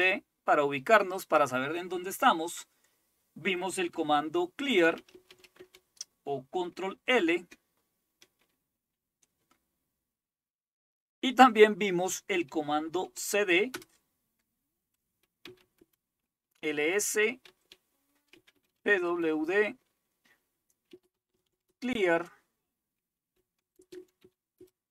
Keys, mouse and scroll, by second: 4.4-5.8 typing, 7.3 ctrl+l, 12.8-13.7 typing, 13.7 Return, 15.2-15.9 typing, 17.2-19.0 typing, 19.1 Return, 20.7-22.0 typing, 23.1-24.7 typing.